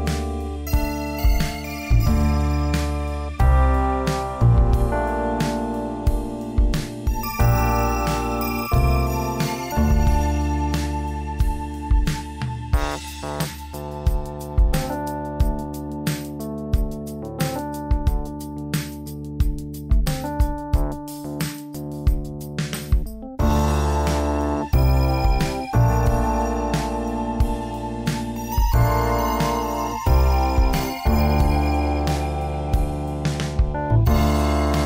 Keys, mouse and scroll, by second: 0.4 F6, 6.4 shift+middle click, 7.1-7.9 scroll up 2, 8.2 Tab, 9.3 e, 10.4 g, 13.3 e, 14.8 g, 16.0 s, 18.6 alt+right click, 19.4 g, 20.6 alt+right click, 21.3 g, 24.2 s, 25.4 space, 29.9 alt+right click, 30.6 e, 31.7 space.